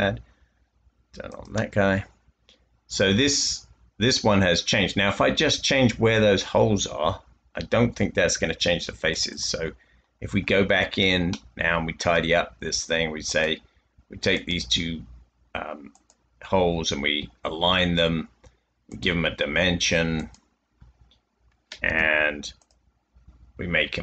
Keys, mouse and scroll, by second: 4.9 space, 11.6 middle click, 21.8 typing.